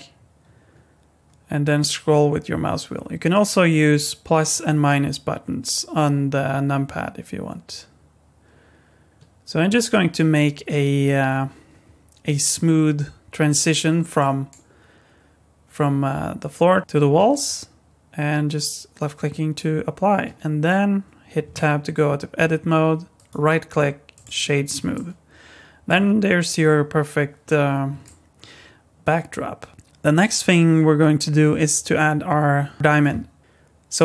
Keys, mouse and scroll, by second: 21.4 Tab, 23.1 right click, 24.9 middle click, 28.0 middle click, 29.7 shift+middle click, 33.4 click.